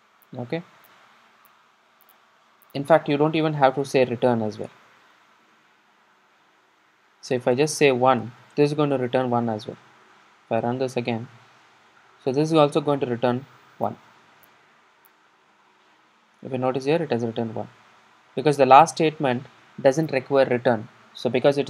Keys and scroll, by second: 4.8 alt+Return, 10.4 super+r.